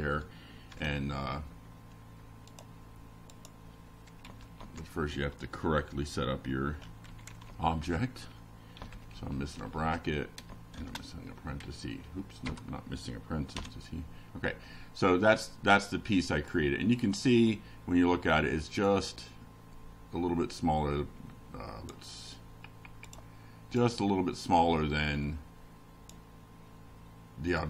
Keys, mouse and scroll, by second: 0.5 shift+0, 2.1 BackSpace, 3.1 F5, 5.8-10.9 drag, 11.8 click, 12.5 click, 16.0-17.5 drag, 21.4 click, 22.6 Down, 23.1 Delete, 23.9 shift+Down, 24.7 shift+End, 25.4 ctrl+c, 25.6 ctrl+Up, 26.9 ctrl+Return.